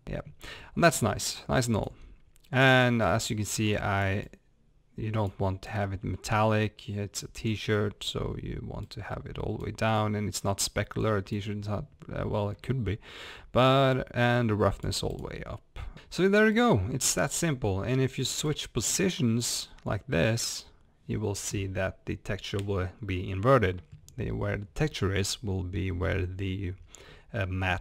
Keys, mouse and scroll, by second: 0.0 scroll up 1, 1.0 click, 3.1-16.0 drag.